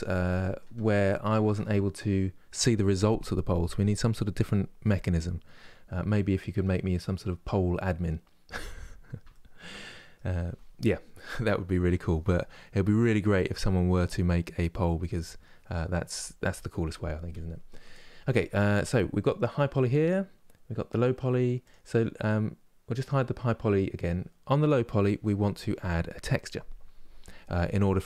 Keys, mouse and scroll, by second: 5.6-6.5 scroll up 1, 6.5-21.3 middle drag, 21.3-28.0 drag.